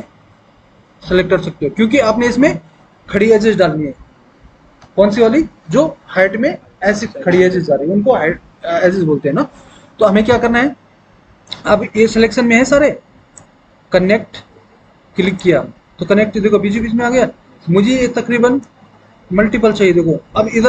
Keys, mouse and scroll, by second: 18.8-20.6 drag.